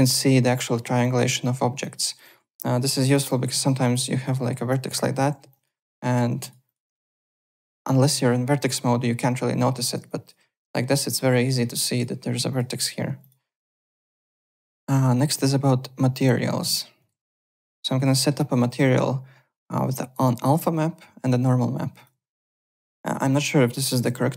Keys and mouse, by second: 1.0 alt+click, 1.4 alt+middle click, 1.7 alt+right click, 1.8 alt+click, 2.9 y, 3.3 alt+click, 3.9 click, 4.5 KP_Enter, 4.6 Return, 5.2 w, 5.5 alt+click, 6.4 click, 7.0 alt+click, 8.1 1, 10.0 alt+click, 11.8 alt+click, 12.5 click, 12.8 w, 13.1 1, 13.2 click, 13.9 BackSpace, 14.6 alt+Tab, 16.9 click, 17.1 `, 17.3 click, 17.6 alt+click, 17.9 alt+right click, 18.1 alt+middle click, 18.4 alt+click, 18.6 alt+Tab, 21.9 click, 22.3 alt+click, 22.5 `, 22.6 click, 24.0 m.